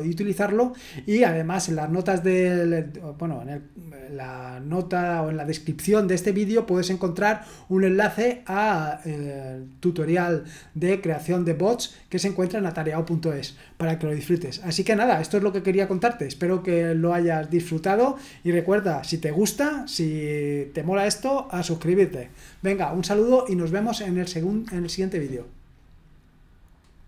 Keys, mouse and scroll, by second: 23.0-23.5 scroll up 1, 27.0 click.